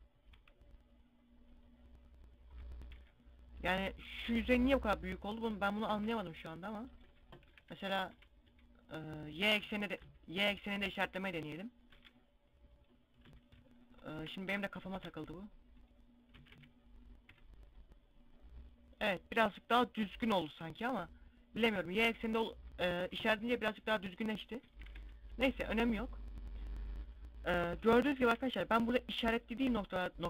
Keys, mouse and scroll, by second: 0.0 u, 2.5 KP_1, 5.4 u, 6.9 KP_7, 7.1 KP_5, 7.6 KP_5, 8.1 z, 9.4 a, 11.4 ctrl+e, 12.7 a, 13.6 alt+shift+right click, 14.4 ctrl+e, 15.8 a, 16.1 a, 16.8 u, 18.9-19.3 scroll up 2, 19.3-19.6 scroll down 2, 20.3 scroll down 2, 22.9 KP_1, 24.3 KP_3, 24.8 KP_5, 25.4 KP_5, 26.0 middle click, 27.9 KP_5, 28.4 scroll down 1.